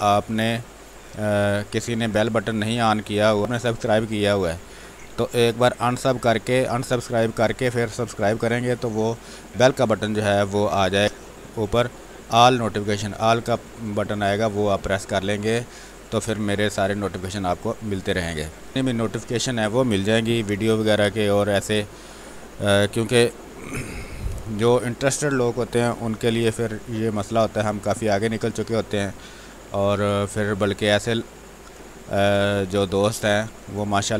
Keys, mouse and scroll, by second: 1.7 click, 3.4 space, 5.4 click, 7.4 space, 11.0-13.0 drag, 17.0 click, 20.7 w, 22.7 space, 24.7-34.1 drag, 28.7-30.7 drag.